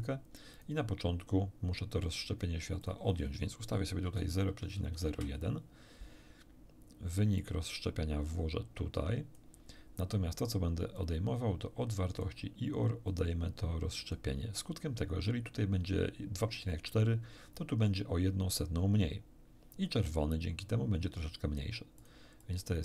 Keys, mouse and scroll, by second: 0.5 click, 2.8 click, 4.1 ., 4.5 0, 4.7 1, 5.1 Return, 7.4-9.5 drag, 10.9-12.4 drag, 13.1-14.3 drag, 22.0 click, 22.4-22.8 drag.